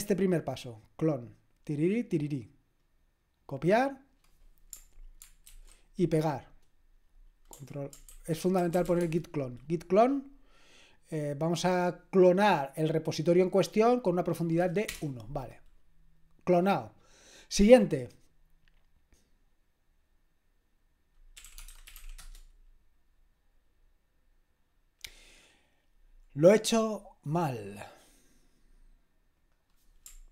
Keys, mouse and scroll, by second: 0.3 click, 1.2-3.2 drag, 2.8 middle click, 2.8-4.2 right drag, 3.4-5.5 drag, 5.5 ctrl+alt+v, 8.1 ctrl+a, 8.4-9.4 typing, 21.1-22.4 typing, 27.8 click, 29.4 click.